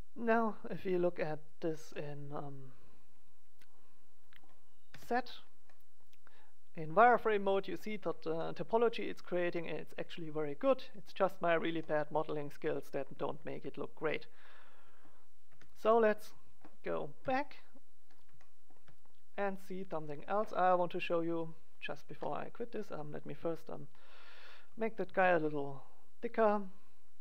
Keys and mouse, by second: 0.9 click, 1.5-3.3 drag, 3.3 middle click, 4.8 z, 11.2-15.4 middle drag, 15.4 click, 15.4 z, 15.6 middle click, 17.1 KP_1, 21.3-22.3 drag, 22.0 ctrl+a, 22.3 middle click, 22.8 right click, 23.7-25.6 drag, 24.2-25.6 middle drag, 24.2 right click, 25.0 ctrl+a, 25.6 right click.